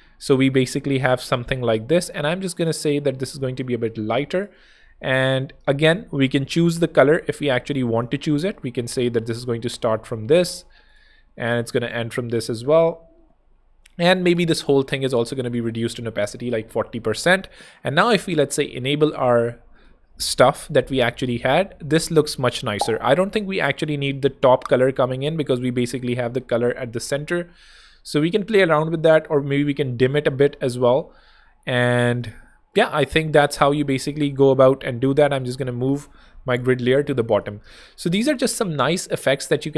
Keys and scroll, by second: 10.2 super+c, 11.8 super+v, 12.0 super+Tab, 12.3 ⟲, 14.8 1, 15.4 4, 17.1 Escape, 17.8 shift+Escape, 18.7 shift+super+h, 23.7 super+x, 27.6 super+z, 28.3 super+2, 29.0 1, 34.3 super+[, 35.6 alt+super+[, 36.2 alt+z, 36.8 z, 37.6 space.